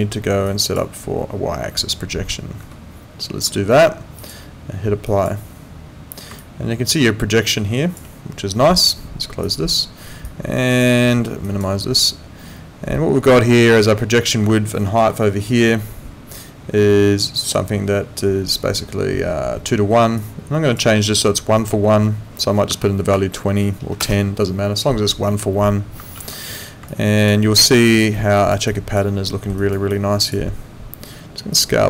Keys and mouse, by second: 2.6 Escape, 4.2 click, 6.4 click, 9.4 click, 11.4 click, 14.9 4, 26.3 ctrl+4, 27.4 alt+right click, 27.9 alt+click, 28.1 alt+middle click, 28.4 alt+right click, 28.7 alt+click, 29.2 alt+middle click, 29.6 alt+right click, 29.9 alt+click, 31.5 click.